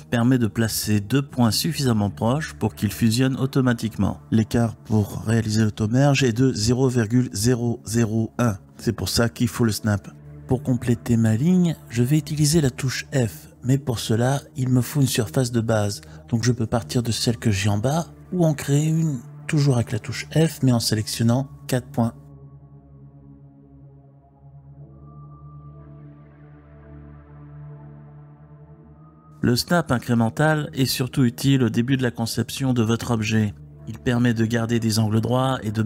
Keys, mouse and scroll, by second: 1.3-2.6 drag, 2.6 e, 3.5 click, 5.4 click, 6.5 g, 7.4 right click, 12.0 click, 13.8 f, 15.2-15.8 typing, 16.5 click, 19.4 click, 21.6 click, 24.1-26.0 typing, 28.6 click, 29.1-32.3 typing, 29.3 click, 30.2 click, 31.0 click, 31.9 click, 32.6 click, 33.1 click, 33.5 g, 33.8 click, 34.7 Tab.